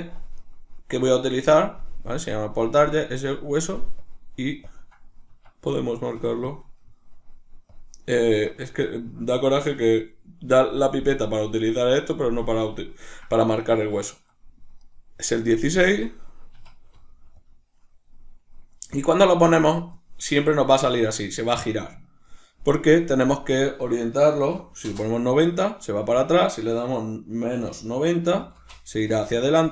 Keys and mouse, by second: 4.0-8.7 drag, 5.4 Escape, 8.4 Escape, 8.7 right click, 14.1 shift+middle click, 14.9 right click, 19.8 drag, 23.3-29.7 drag, 24.9 Return, 29.3 Return.